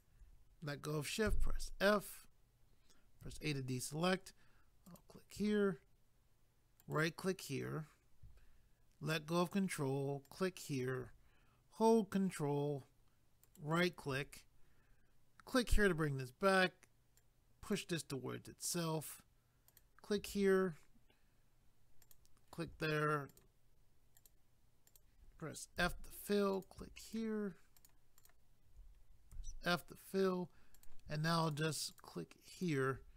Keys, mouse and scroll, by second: 1.3 f, 4.9 click, 6.8 ctrl+right click, 10.3 click, 13.4 ctrl+right click, 15.5 click, 17.2 click, 19.7 click, 22.0 click, 23.3 shift+click, 24.9 shift+click, 25.8 f, 26.5 click, 27.0 shift+click, 27.8 shift+click, 29.3 f, 30.7 click, 31.4 shift+click, 32.0 shift+double click, 32.5 shift+click.